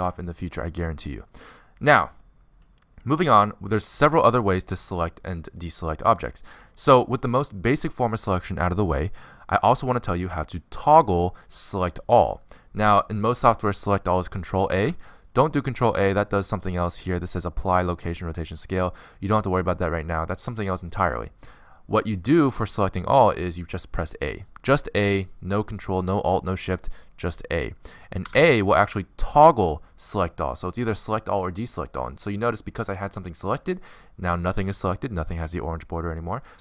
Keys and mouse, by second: 0.7 middle click, 2.7 middle click, 16.4 ctrl+a, 28.8 a, 33.6-36.6 middle drag.